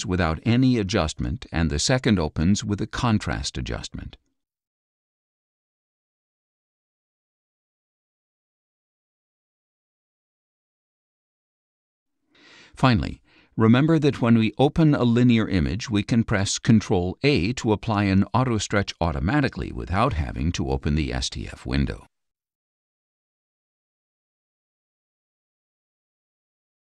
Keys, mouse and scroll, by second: 3.5-6.8 middle drag, 3.5-6.8 scroll, 9.1 click, 10.6 click, 11.7 click, 17.3 ctrl+a, 23.8 click.